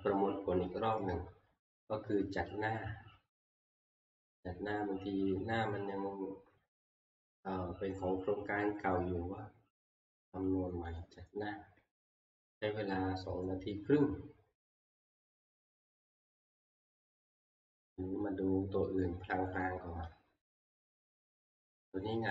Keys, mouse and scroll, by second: 11.0 click, 19.7 click, 20.7 shift+middle click, 21.1 scroll, 21.6 scroll down 5, 21.9-22.3 shift+scroll, 22.0 shift+middle click, 22.1 shift+middle click.